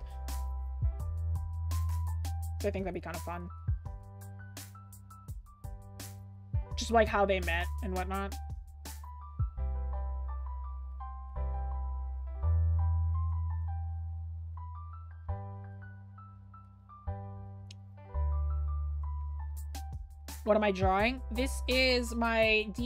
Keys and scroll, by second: 4.4-4.9 scroll up 1, 4.9 scroll, 5.5-7.6 scroll up 1, 17.5 scroll down 1, 19.3 scroll up 1.